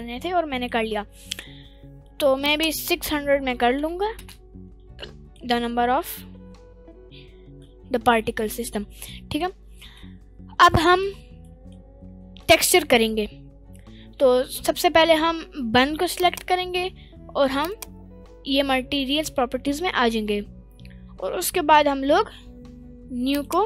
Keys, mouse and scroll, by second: 0.2-0.5 scroll down 1, 0.5 middle click, 0.9-1.5 scroll up 3, 1.3 middle click, 2.4-4.5 drag, 3.8 0, 4.8 scroll down 3, 5.0-5.4 middle drag, 5.6-6.8 scroll up 1, 7.4 scroll down 1, 7.6-8.1 middle drag, 8.7-9.1 scroll down 1, 9.1-9.4 middle drag, 9.6 scroll up 1, 10.7-11.0 middle drag, 11.1 scroll down 1, 11.4 middle click, 16.1 click, 17.6 click, 23.3 click.